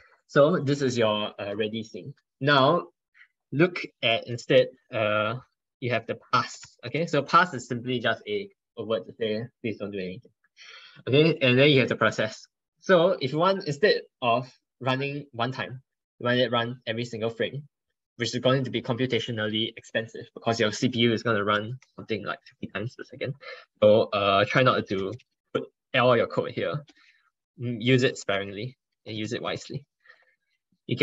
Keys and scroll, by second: 4.9 ctrl+BackSpace, 5.0 ctrl+BackSpace, 5.3 ctrl+BackSpace, 5.5 ctrl+BackSpace, 5.8 ctrl+BackSpace, 21.4 ctrl+BackSpace.